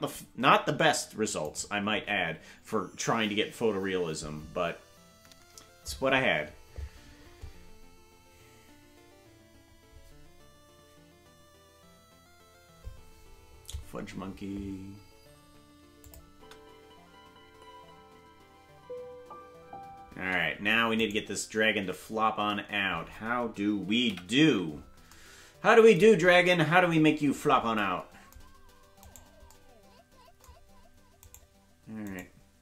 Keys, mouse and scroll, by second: 16.0 click, 16.3 space, 21.1 right click, 21.1 space, 21.8 ctrl+Tab, 24.1 KP_Decimal, 26.2-26.8 scroll up 4, 26.9-28.0 scroll down 4, 29.4 right click, 31.4 right click.